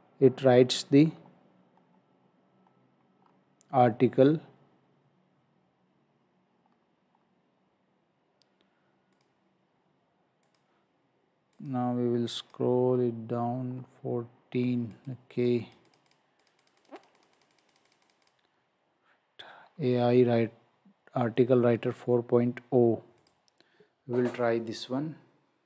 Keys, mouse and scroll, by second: 1.1 scroll up 1, 3.7-4.4 scroll down 1, 6.7-7.1 scroll down 1, 7.1-8.1 scroll up 1, 9.1 click, 13.1-13.5 scroll up 1, 13.8-14.3 scroll down 1, 15.0 click, 15.5 click, 15.9 click, 16.1 double click, 16.4 click, 16.6 double click, 17.2 click, 19.7 scroll down 1, 23.2 click.